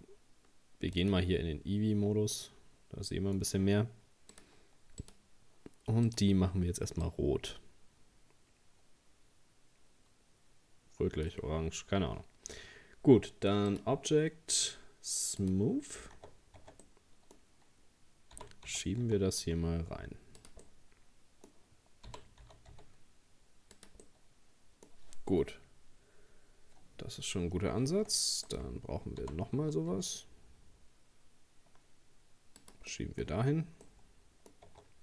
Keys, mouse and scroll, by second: 1.5 click, 2.4-4.3 middle drag, 4.3-9.1 drag, 11.6-12.5 scroll down 2, 12.8-13.7 scroll up 2, 13.7-16.2 drag, 16.2 Tab, 16.6 Tab, 16.8-18.4 middle drag, 18.4 g, 20.6-22.1 middle drag, 22.1 g, 24.0-27.1 middle drag, 27.9 shift+d, 29.2 g, 32.9 middle click, 33.4-33.9 scroll up 1, 33.9 middle click, 34.7 Tab.